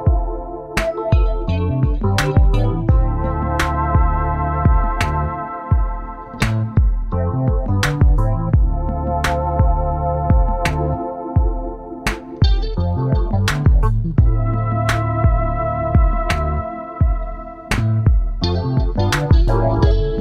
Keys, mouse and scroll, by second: 1.4 double click, 3.8 double click, 4.0 shift+Right, 4.4 shift+Right, 7.5 Up, 9.2 Right, 9.7 Right, 19.9 ctrl+y.